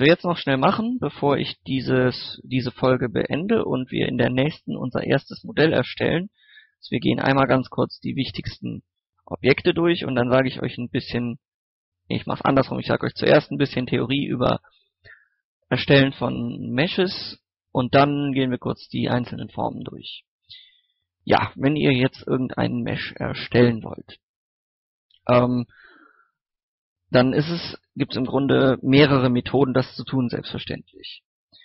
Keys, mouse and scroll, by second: 1.0 click, 1.5 shift+middle click, 4.2 shift+middle click, 4.7 scroll up 1, 5.3 scroll down 1, 5.6-6.1 scroll up 2, 5.7 middle click, 6.2 shift+middle click, 6.7 shift+a, 9.2 shift+middle click, 9.9 shift+middle click.